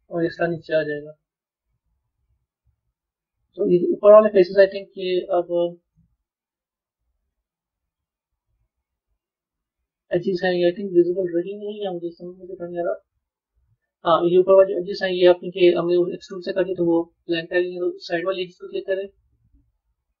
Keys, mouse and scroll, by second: 1.3 click, 2.3 click, 3.0-5.7 middle drag, 5.7 click, 7.2 click, 15.1 middle click, 15.7-17.5 middle drag, 17.5 shift+click, 18.6-20.2 middle drag.